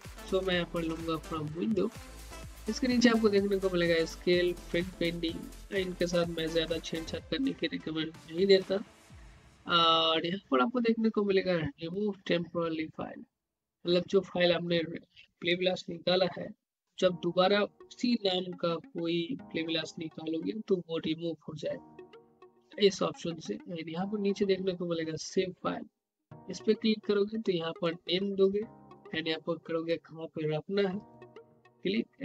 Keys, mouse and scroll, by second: 0.7 click, 9.3-9.9 scroll down 1, 27.8-30.6 drag, 31.3 click.